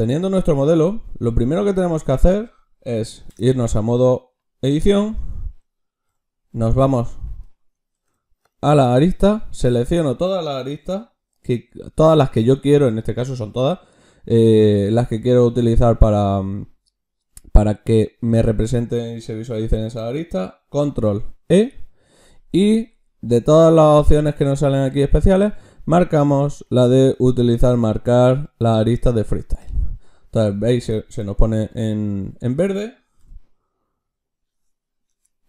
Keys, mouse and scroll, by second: 3.3 Tab, 6.1 a, 8.0 ctrl+Tab, 9.2 a, 21.3 ctrl+e, 33.3 a, 35.1 Tab.